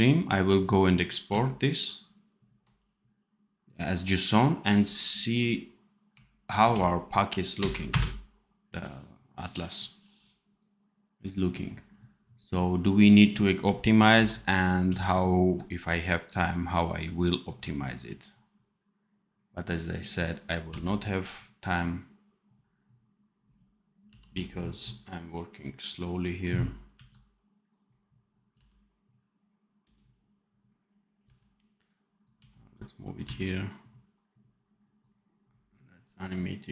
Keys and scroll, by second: 7.5 Delete, 14.0 n, 20.6 v, 24.0 p, 26.8 x, 28.4 v, 29.7 space, 31.1 v, 32.3 x, 33.3 v.